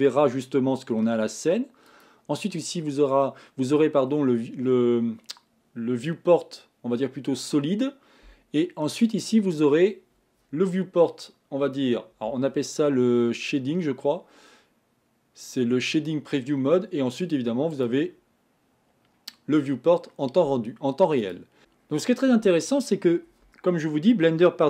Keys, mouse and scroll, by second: 1.9 click, 9.2 click, 17.8 click.